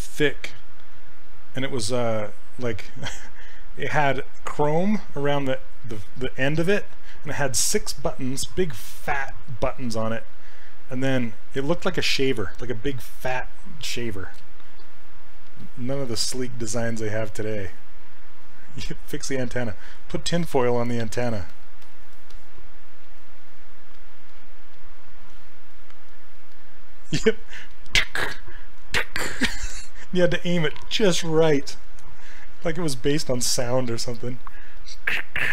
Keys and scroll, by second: 15.9 s, 23.1 s.